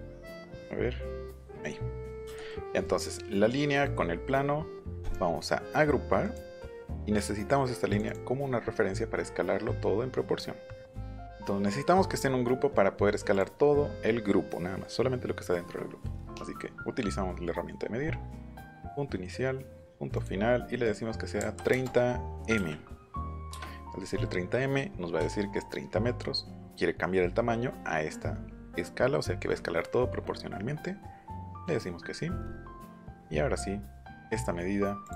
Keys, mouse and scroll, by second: 1.5 click, 2.8 click, 5.0 right click, 6.2 click, 6.7 middle click, 6.7 scroll down 1, 6.9-7.2 scroll up 1, 7.9 click, 13.3 click, 17.9 middle click, 18.8 click, 20.2 click, 21.4 KP_3, 21.7 KP_0, 22.5 m, 23.5 Return, 25.2 Caps_Lock, 31.5 click, 32.1-32.6 scroll down 2, 32.7 scroll up 1, 32.9-33.4 scroll down 2, 33.5-33.8 scroll up 2, 35.0 click.